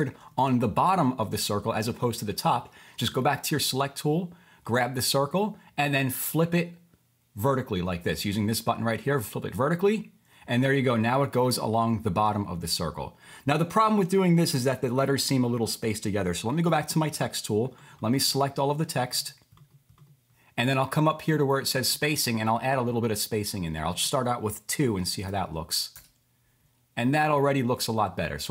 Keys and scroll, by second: 0.3 super+z, 16.7 t, 26.3-27.0 typing.